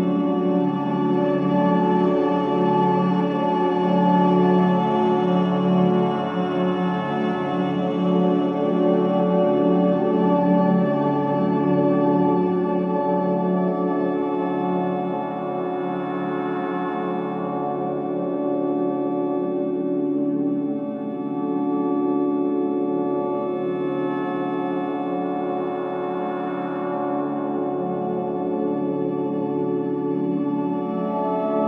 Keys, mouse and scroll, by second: 0.7-7.0 drag, 19.8 alt+click, 20.3 alt+middle click, 20.7 alt+right click, 21.0 alt+click, 21.4 alt+right click, 21.8 click, 22.2 alt+click, 23.0 alt+right click, 23.4 alt+middle click, 23.7 alt+click, 24.1 alt+right click, 24.5 alt+click, 24.9 alt+middle click, 25.3 alt+right click, 26.3 click, 26.7 alt+click, 27.0 alt+right click, 28.8 ctrl+s, 29.7 alt+click, 30.1 alt+right click, 30.4 alt+click, 30.7 alt+middle click, 31.1 alt+right click.